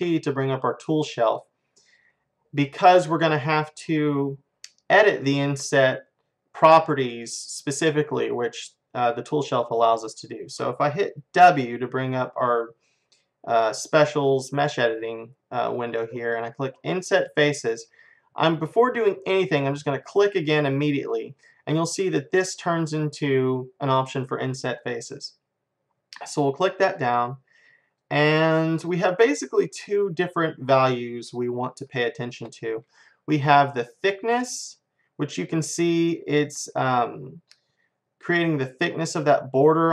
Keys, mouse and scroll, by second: 0.0-2.4 middle drag, 0.0 t, 3.9-7.0 middle drag, 11.4 w, 26.2-28.2 drag, 29.8 click, 31.5 middle click, 32.0-33.3 middle drag, 33.7 middle click, 34.3 click.